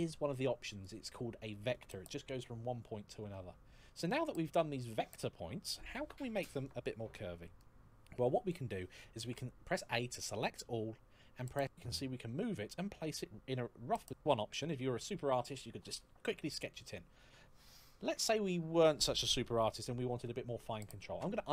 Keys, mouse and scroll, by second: 0.6 click, 9.0 a, 11.5 e, 20.8 ctrl+z.